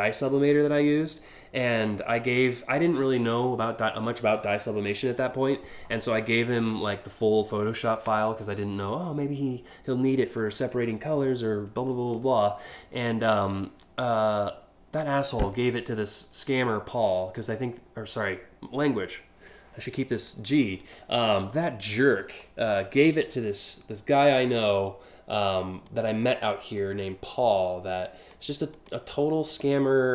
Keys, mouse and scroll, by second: 22.0 click, 25.1 click, 25.5 click, 26.0 click, 26.4-27.9 drag, 28.4 click, 29.2 click.